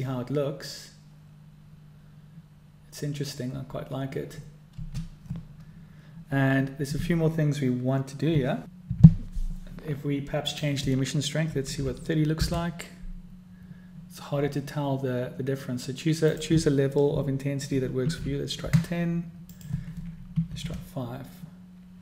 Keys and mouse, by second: 5.4 space, 11.3-14.7 drag, 17.0-22.0 drag.